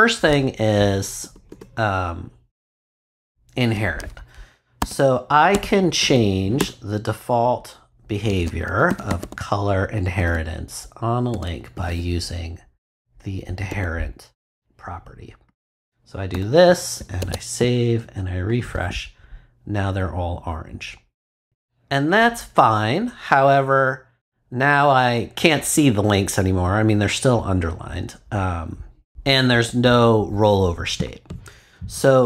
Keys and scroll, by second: 1.2 Return, 4.8 a, 5.5 space, 6.0 shift+[, 6.6 shift+Return, 7.1 Return, 8.3 c, 8.6 o, 9.7-11.8 typing, 13.7 h, 16.3 ;, 17.0 super+;, 17.2 super+s.